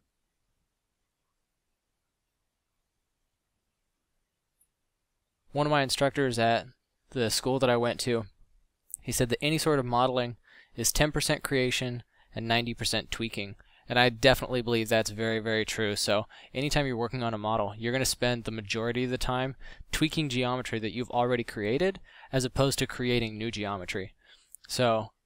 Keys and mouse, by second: 1.2 f, 24.0 f.